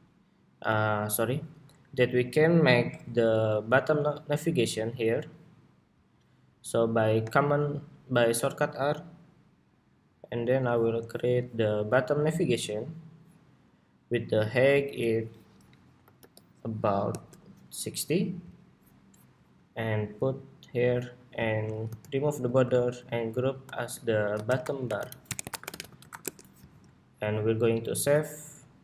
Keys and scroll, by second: 25.2 super+g, 26.2 super+r.